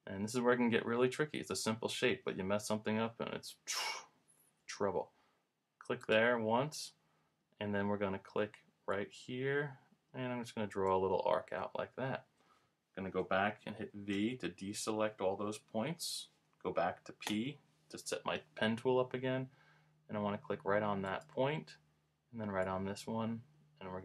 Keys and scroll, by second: 0.0 p, 14.1 v, 16.0 v, 17.3 p.